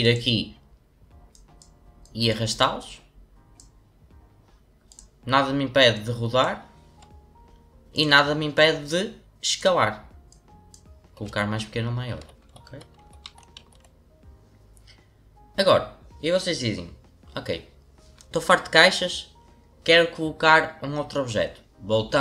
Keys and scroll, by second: 12.1 ctrl+z, 12.4 ctrl+z, 12.6 ctrl+z.